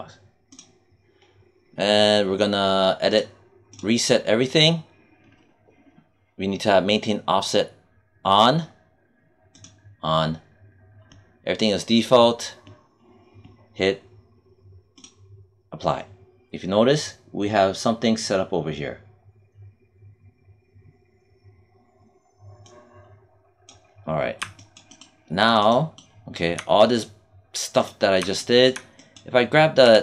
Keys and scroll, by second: 29.7 w.